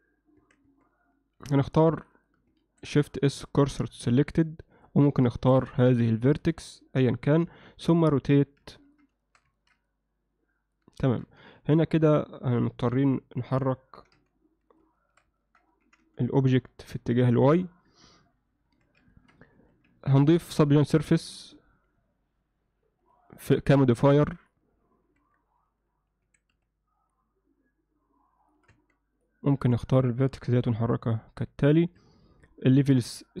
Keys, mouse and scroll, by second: 0.4 Tab, 0.7 Tab, 1.4 z, 2.0 click, 2.6 shift+s, 5.3 shift+s, 7.3 KP_7, 8.8 ctrl+middle click, 9.2 alt+shift+middle click, 9.6 ctrl+middle click, 9.9 middle click, 11.1 ctrl+middle click, 11.6 Tab, 12.9 KP_7, 14.0 g, 15.0 alt+shift+middle click, 15.4 ctrl+alt+middle click, 15.9 g, 17.9 KP_1, 18.7 Tab, 19.1 ctrl+alt+middle click, 19.6 z, 20.1 ctrl+middle click, 21.1 ctrl+2, 23.1 click, 23.3 click, 23.6-24.5 drag, 25.2 Tab, 26.3 s, 28.7 Tab, 29.2 click, 29.6 1, 30.6 g, 32.0 Tab, 33.1 click, 33.3 click.